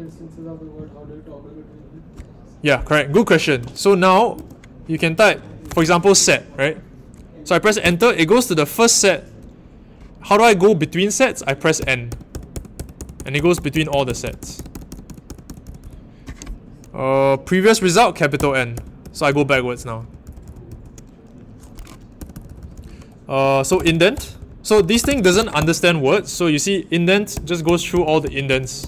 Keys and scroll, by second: 4.3 /, 5.3-6.2 typing, 7.8 Return, 11.7-15.7 typing, 18.3-20.6 typing, 22.1-25.9 typing, 27.3-28.8 typing.